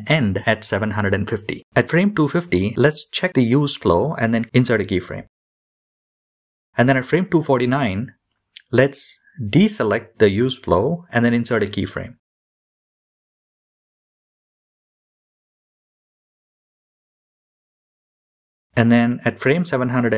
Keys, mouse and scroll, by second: 7.7 click, 10.6 click, 12.0 i, 17.1-20.1 drag.